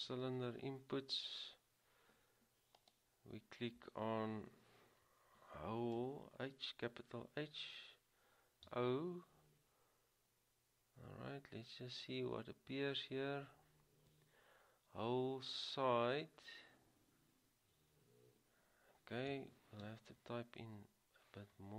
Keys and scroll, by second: 0.4-1.1 typing, 7.0 typing, 8.9 typing, 19.4 |.